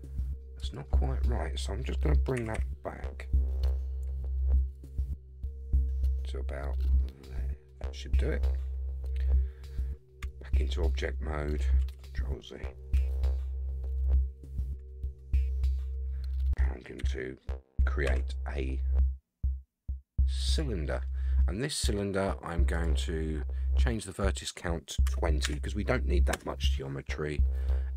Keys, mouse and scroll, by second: 1.1 scroll up 4, 2.3 g, 8.0-8.6 scroll down 4, 10.2 Tab, 10.5-11.6 middle drag, 11.9 alt+z, 12.9 KP_1, 13.7 scroll up 4, 15.0 scroll down 3, 15.8 middle click, 17.0 KP_1, 18.0 shift+a, 22.8 click, 24.2-26.4 drag.